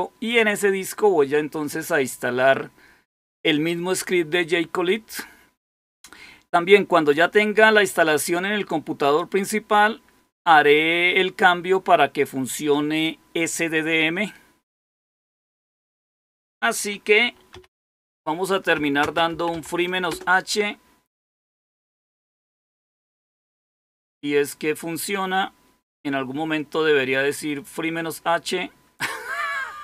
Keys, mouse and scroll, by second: 9.0 click, 16.0 click, 17.4-19.9 typing, 20.0 Return.